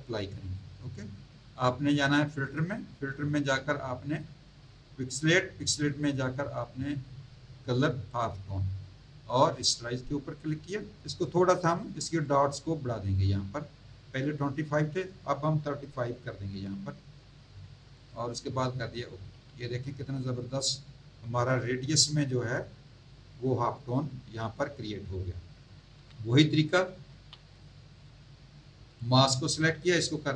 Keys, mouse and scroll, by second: 2.3 click, 5.0 click, 8.1 click, 9.6 click, 11.2 click, 12.3 click, 16.0 KP_3, 16.5 KP_5, 18.0 click, 25.9 v, 27.1 z, 27.5 click, 27.9 click, 28.9 click.